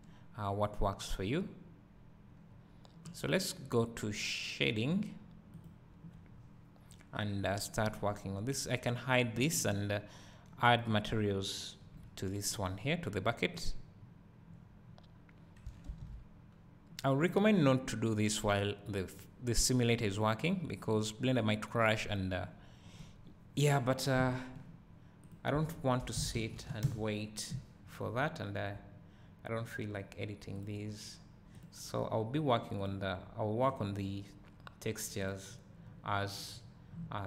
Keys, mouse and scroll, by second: 1.6-5.9 drag, 1.6-2.5 scroll up 1, 2.5-5.9 scroll down 1, 8.7 h, 9.4-11.1 scroll up 1, 11.1 click, 12.0 KP_Decimal, 14.3 click, 17.6 ctrl+s, 25.8-37.2 drag.